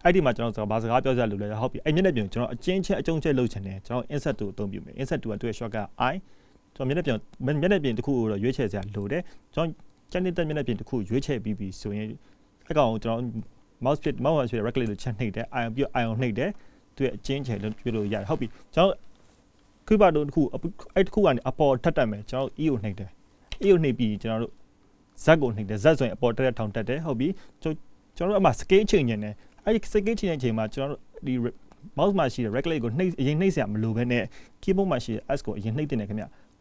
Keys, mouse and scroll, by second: 3.5 shift+middle click, 4.8 middle click, 11.8-12.3 scroll down 1, 12.3 middle click, 22.0 middle click.